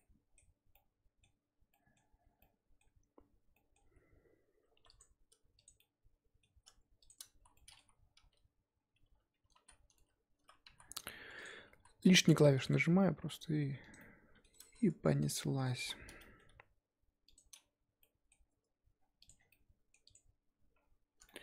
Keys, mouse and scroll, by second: 0.5 scroll up 1, 0.7 middle click, 1.3-1.7 scroll up 3, 1.7 middle click, 2.2 Tab, 2.4-3.8 middle drag, 3.8 z, 5.0 click, 5.6 click, 5.8-7.1 middle drag, 7.1 shift+click, 7.4 z, 7.5 middle click, 8.1 t, 9.5 ctrl+z, 9.9 ctrl+z, 10.7 z, 11.4 shift+click, 11.8 z, 12.4 g, 14.0 middle click, 14.8 z, 15.3 click, 15.4 middle click, 15.8 z, 16.2 middle click, 16.5 g, 18.0 middle click, 18.5 Tab, 19.0-19.5 scroll down 7, 19.3 click, 19.5 middle click, 20.1 click, 20.7-21.3 scroll up 2, 21.3 shift+middle click.